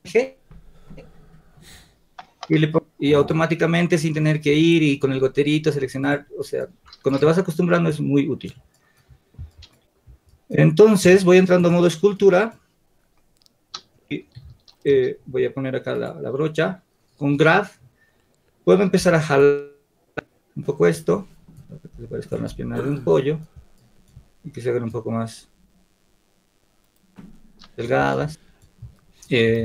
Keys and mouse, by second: 16.1 g, 22.4 f.